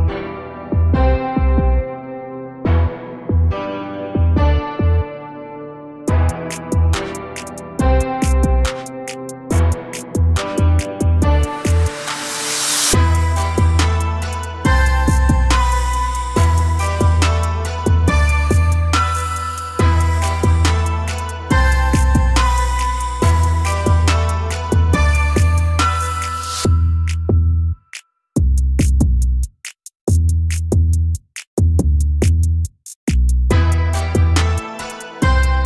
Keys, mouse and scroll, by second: 0.2 shift+click, 0.6 shift+click, 2.4 ctrl+j, 5.0 click, 5.7 scroll down 3, 6.0 a, 6.1 a, 7.1-8.3 shift+middle drag, 8.3 click, 9.8-10.8 drag, 10.8-11.5 scroll up 7, 11.5 shift+middle click, 12.5 Tab, 14.9 3, 15.6 Tab, 19.1 click, 22.8-27.8 drag, 29.4 click, 30.4-33.4 drag, 33.4 Tab, 34.1 3, 34.5 click, 34.7 click.